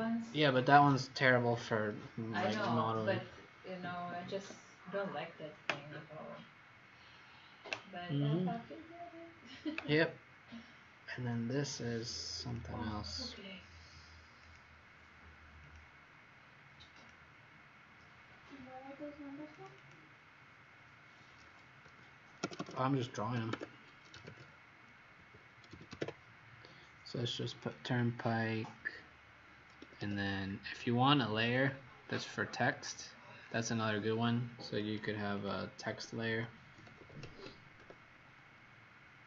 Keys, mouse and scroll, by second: 11.1-11.7 scroll up 3, 14.4 click, 19.7 click, 21.4-22.5 typing, 23.4 Caps_Lock, 25.1-26.4 typing, 27.5 click, 29.8 Escape, 30.1 Escape, 31.4 click, 36.5-38.1 typing.